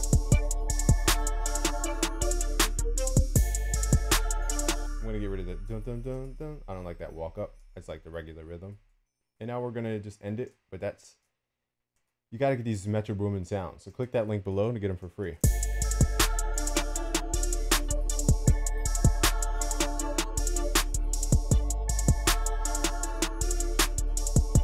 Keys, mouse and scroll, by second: 14.0 x, 14.2 x, 15.4 x, 19.1 F1, 23.6-24.6 drag.